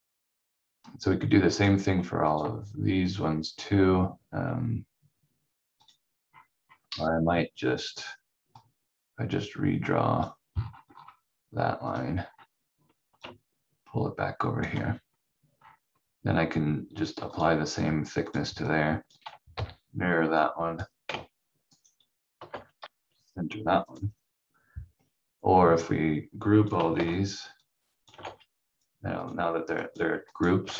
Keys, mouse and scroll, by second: 6.2 scroll up 1, 8.5 click, 10.5 scroll down 1, 11.9 click, 12.1 scroll down 1, 13.3 ctrl+click, 15.0-15.5 scroll down 1, 15.5 scroll up 1, 17.3 click, 19.5 m, 20.4 click, 21.7 right click, 22.5 ctrl+g, 23.1 c, 23.8 click, 26.9 ctrl+g, 27.6 click, 28.2 ctrl+g, 29.2 click, 30.7 ctrl+z.